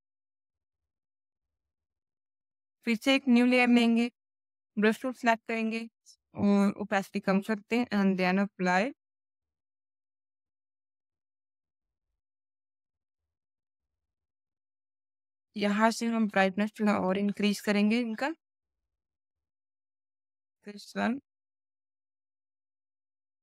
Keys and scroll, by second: 4.3 b, 4.8 alt+b.